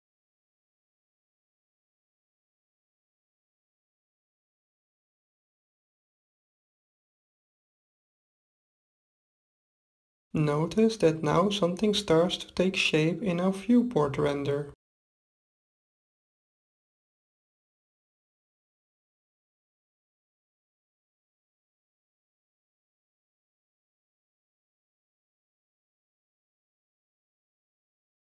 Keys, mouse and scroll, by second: 3.5-5.2 middle drag, 5.2-6.4 drag, 6.8-8.7 drag, 11.0-12.9 drag, 18.2-19.5 middle drag, 19.5-22.9 drag, 23.5-25.3 drag, 25.4-27.2 drag, 28.2-28.3 drag.